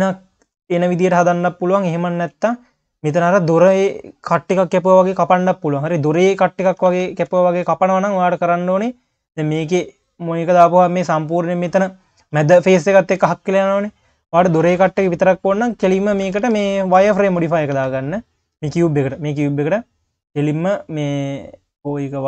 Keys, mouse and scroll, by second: 0.0 q, 1.0 q, 1.6 scroll down 1, 1.9 q, 3.1-6.2 scroll down 3, 6.9 ctrl+z, 10.3 click, 10.7 scroll up 1, 10.8 q, 11.2-12.0 scroll up 2, 12.0 q, 12.9 q, 14.1 click, 14.7 q, 16.3 ctrl+z, 16.5 ctrl+z, 17.7 ctrl+z, 18.8 click, 19.9-22.2 drag.